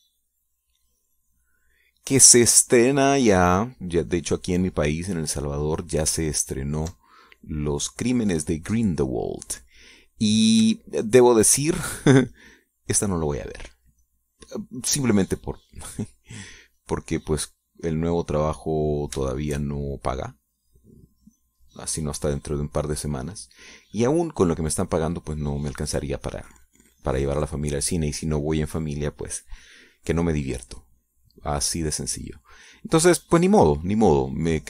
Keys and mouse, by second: 2.6-6.9 drag, 7.5 ctrl+click, 8.2-10.5 ctrl+drag, 10.8 click, 11.7-13.1 shift+drag, 13.4-20.7 shift+drag, 20.7-22.6 shift+drag, 22.7-25.1 drag, 25.3 middle click, 26.4-29.0 drag, 31.4 click, 32.1 click, 32.3 middle click, 32.9 middle click.